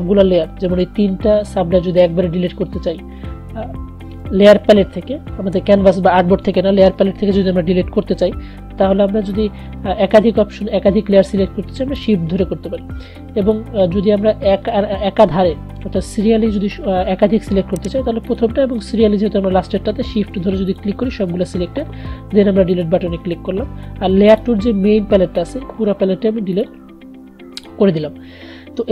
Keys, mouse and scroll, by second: 9.4 click, 18.7 click.